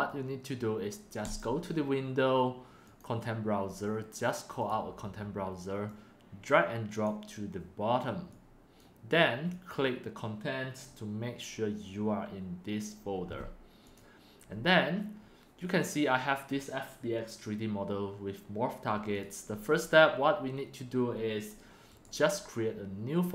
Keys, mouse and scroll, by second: 1.1 click, 2.8 click, 5.9-6.5 drag, 8.2 click, 9.5 click, 13.9-17.2 drag, 19.1-20.0 drag, 21.3 drag.